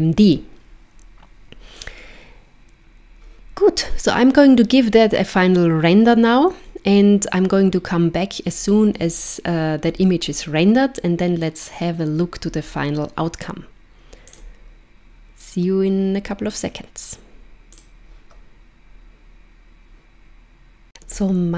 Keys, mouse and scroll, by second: 14.2 click.